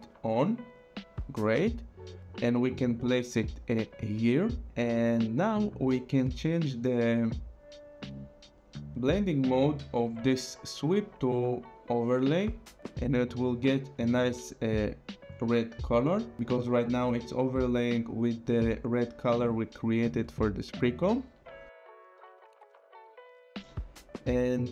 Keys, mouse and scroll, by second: 0.3 click, 2.5 click, 7.3 click, 11.8 click, 18.7 click, 20.2 click, 22.3 click.